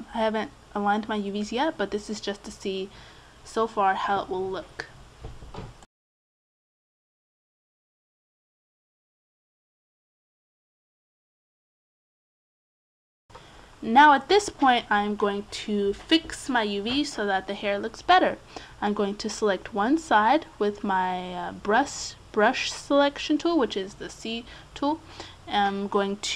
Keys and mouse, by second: 9.0 a, 9.6 c, 14.2-15.6 right drag, 15.4 s, 15.7 right click, 16.4-18.2 middle drag, 18.2-19.8 drag, 19.8-22.9 middle drag, 22.9-24.4 drag, 24.6 s, 25.5 a, 25.9 c.